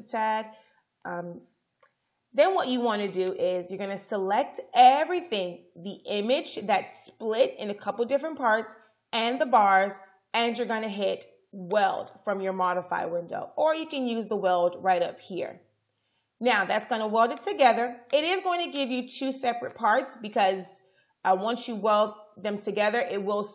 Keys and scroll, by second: 1.2 Right.